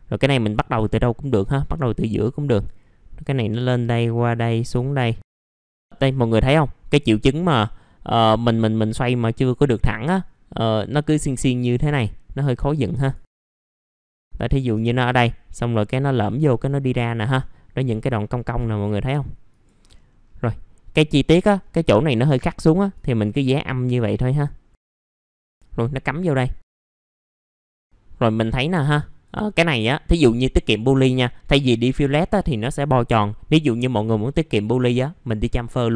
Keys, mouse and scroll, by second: 0.4 click, 0.7-1.3 scroll up 1, 1.3 click, 2.4 shift+click, 3.2 shift+click, 4.1 shift+click, 4.6 shift+click, 5.4 shift+click, 5.5 scroll down 1, 5.8-6.5 scroll up 1, 10.5 middle click, 11.2-11.7 scroll up 1, 12.9 shift+click, 13.4 shift+click, 13.6 shift+click, 14.4 shift+click, 15.5 click, 16.6 middle click, 16.7 scroll down 1, 17.2-17.9 scroll up 1, 19.5 shift+click, 19.9 scroll down 1, 21.3-21.8 scroll up 1, 22.9 shift+click, 23.5 shift+click, 24.1 shift+click, 25.0 shift+click, 25.3 shift+click, 25.4-26.1 scroll down 1, 26.6-27.0 scroll up 1, 27.0 right click, 27.2 scroll up 1, 27.3 middle click, 28.9 click, 29.9 middle click, 34.8 click, 35.5-35.9 scroll up 1.